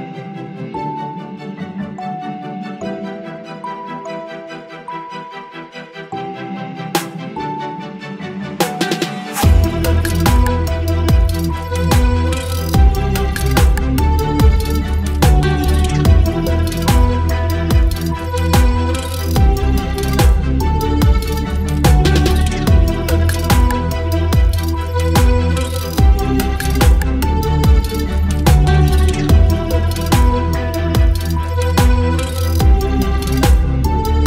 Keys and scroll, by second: 5.2 Delete, 5.8 ctrl+d, 6.0 ctrl+v, 12.2 ctrl+t, 16.4 Return, 17.4 Return, 25.0 space, 33.5 Delete.